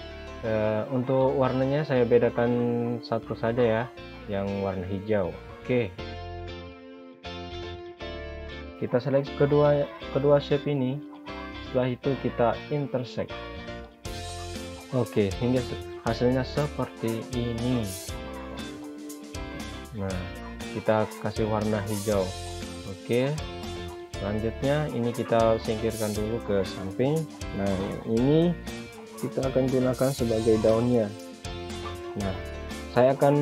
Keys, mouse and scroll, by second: 2.8 click, 15.0 click, 18.0 click, 21.2 click, 26.5 click, 29.3 click.